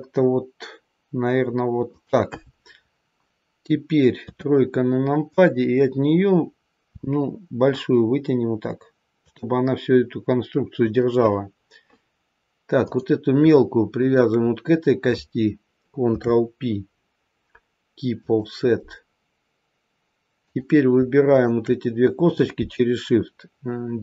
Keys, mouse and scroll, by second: 4.1 KP_3, 5.2 click, 6.8 e, 10.7 click, 12.8 click, 13.8 shift+click, 16.0 ctrl+p, 20.3 click, 21.2 shift+click.